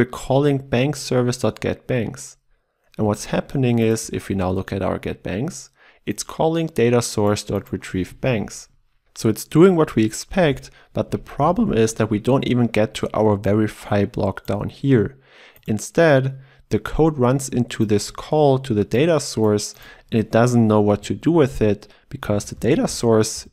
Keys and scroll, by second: 4.0 ctrl+b, 10.3 ctrl+alt+Left, 18.0 ctrl+b, 22.3 ctrl+alt+Left.